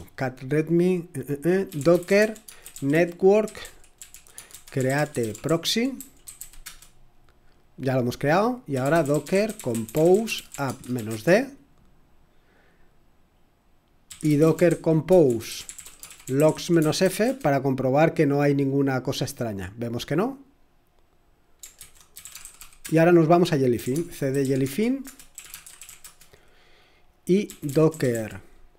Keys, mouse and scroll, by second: 1.4-6.7 typing, 8.5-11.6 typing, 13.6-17.7 typing, 21.8 ctrl+c, 21.9-28.7 typing.